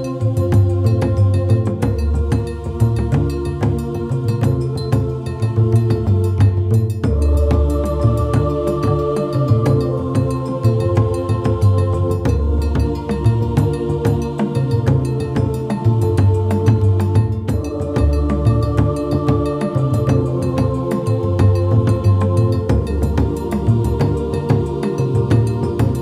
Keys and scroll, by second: 3.3 ctrl+s, 10.6 ctrl+shift+KP_Add, 15.4 ctrl+shift+KP_Add, 19.3 ctrl+z, 19.8 ctrl+z, 25.9 ctrl+z.